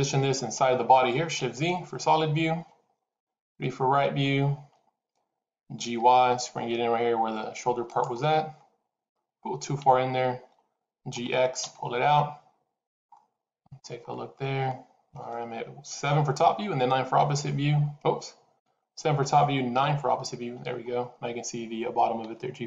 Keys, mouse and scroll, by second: 1.0 scroll down 1, 1.3 shift+z, 3.0 KP_3, 5.7 g, 8.1 middle click, 9.6 KP_7, 11.0 g, 13.0 middle click, 13.9 scroll up 3, 14.2 middle click, 15.9 KP_7, 17.1 KP_6, 18.4 KP_7, 19.6 KP_9, 22.1 g.